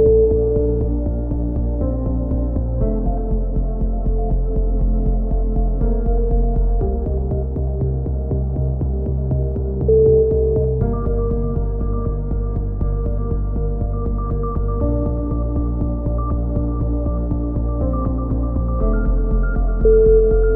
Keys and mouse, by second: 0.0 a, 0.7 right click, 2.1 a, 2.2 click, 3.3 right click, 3.6 click, 4.4 a, 4.6-6.0 drag, 5.2 k, 11.4 right click, 11.4 e, 12.7 right click, 13.1 f, 13.4 KP_3, 13.8 right click, 15.3 a, 15.6 c, 15.8 right click, 16.0 click, 16.6 click, 16.6 a, 16.7 z, 17.7 KP_7, 18.0 click, 19.9 right click, 20.4 e.